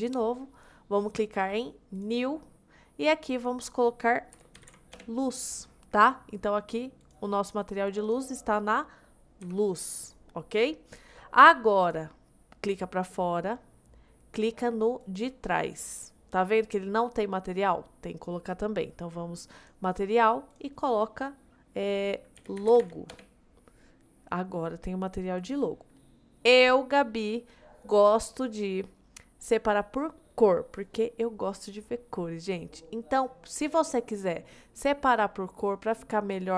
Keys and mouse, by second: 2.1-5.0 drag, 7.1 click, 8.6 middle click, 9.5 g, 11.9 click, 15.0 click, 19.6 click, 20.6-23.2 drag, 25.4 click.